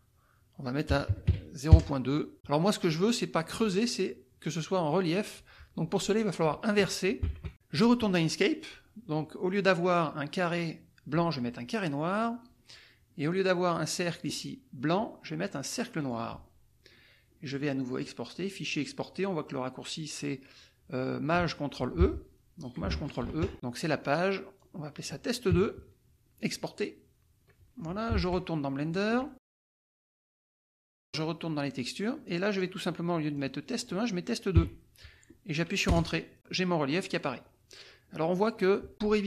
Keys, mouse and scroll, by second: 0.9 KP_0, 1.1 KP_Decimal, 1.3 KP_2, 7.3 alt+Tab, 12.1 click, 13.3 click, 14.2 click, 15.9 click, 17.9 click, 22.0 Escape, 23.2 ctrl+shift+e, 23.5 click, 24.5 click, 26.4 click, 28.2 alt+Tab, 29.0 alt+click, 30.6 click, 32.2 click, 33.3-34.5 drag, 34.5 KP_2, 38.4-38.7 scroll up 2.